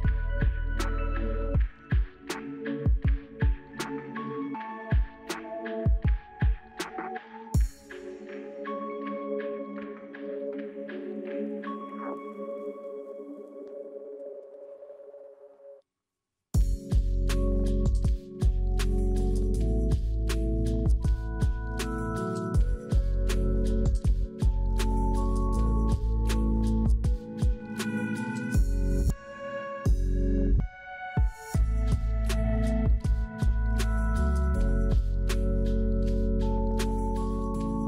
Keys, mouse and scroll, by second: 10.6 scroll down 2, 11.0 middle click, 11.4 scroll down 2, 13.9 Delete, 22.7 middle click, 23.2-25.7 scroll down 3, 25.7-28.7 scroll down 2, 37.0 scroll down 3.